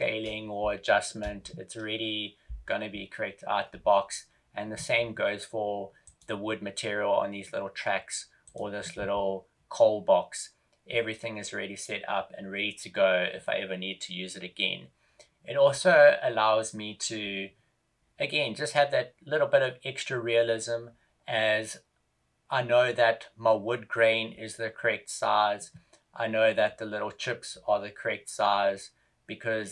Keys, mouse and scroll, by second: 0.9 shift+scroll up 1, 1.2 KP_0, 6.0 right click, 8.8 right click.